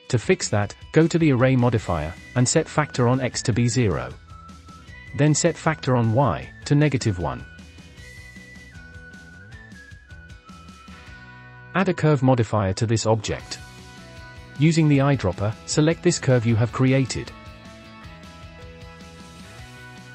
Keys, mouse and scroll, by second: 0.8-3.7 drag, 4.8-7.8 drag, 8.2 click, 8.7-9.0 scroll down 4, 9.0-9.5 shift+middle drag, 9.5 scroll up 3, 9.6-10.1 shift+middle drag, 10.1 click, 11.4-11.8 drag, 13.1-14.3 drag, 14.7-15.4 scroll down 1, 15.4 click, 17.8-18.7 scroll down 3, 18.7-19.7 drag.